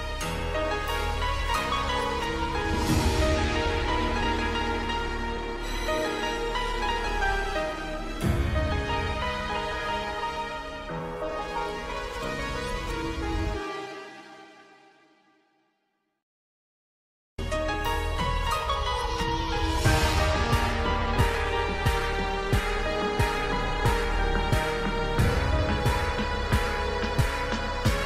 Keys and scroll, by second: 4.5 alt+c, 5.4 Escape, 11.5 shift+Page_Up, 12.5 F2, 16.8 F3, 18.0 Escape, 19.6 shift+F2, 20.0 shift+Page_Up, 20.6 F3, 23.5 F4, 23.8 F3, 24.3 Escape, 26.2 shift+F2, 26.9 F9.